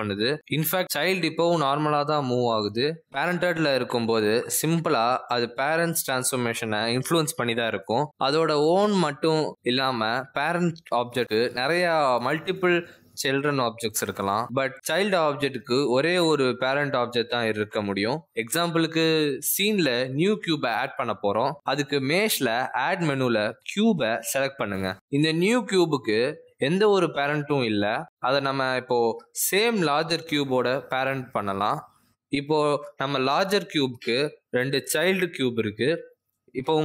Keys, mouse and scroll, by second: 0.1 r, 1.9 g, 5.2 g, 7.3 click, 7.5 g, 8.5 click, 8.6 g, 9.3 click, 9.5 g, 10.6 click, 10.8 g, 11.8 click, 12.0 g, 13.7 g, 15.6 click, 16.5-16.9 scroll down 2, 18.9 click, 19.4 g, 21.4 g, 23.1 click, 26.4 g, 30.5 shift+click, 32.7 right click, 36.5-36.8 scroll down 3.